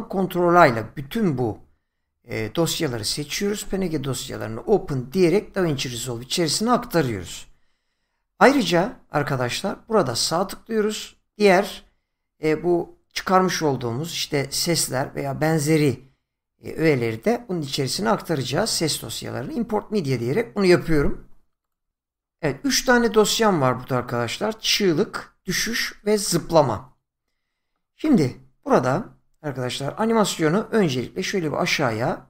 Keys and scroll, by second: 3.0 ctrl+a.